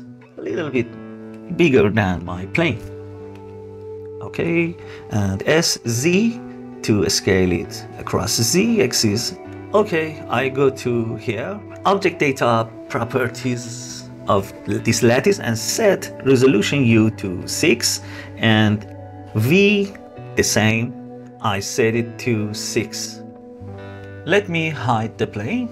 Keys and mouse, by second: 0.8 click, 3.2-4.5 middle drag, 5.1 s, 5.5 z, 9.5-10.2 middle drag, 12.7 click, 17.2 click, 17.8 click, 18.0 click, 18.4 click, 20.3 click, 20.7 click, 21.5 click, 22.9 click, 24.7 click.